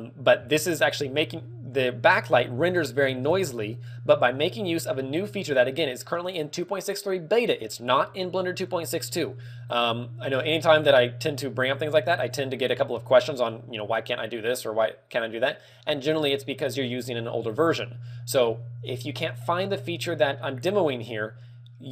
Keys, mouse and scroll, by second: 3.6 shift+space, 5.0 scroll up 2, 10.5 click.